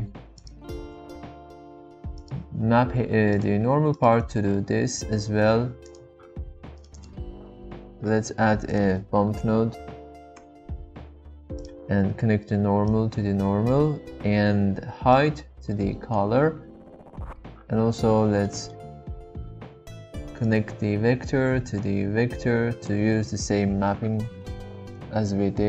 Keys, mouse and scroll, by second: 0.3-0.8 drag, 1.1 shift+d, 4.0 drag, 8.0 shift+a, 13.0-14.0 drag, 18.7 middle click, 20.4-23.0 drag.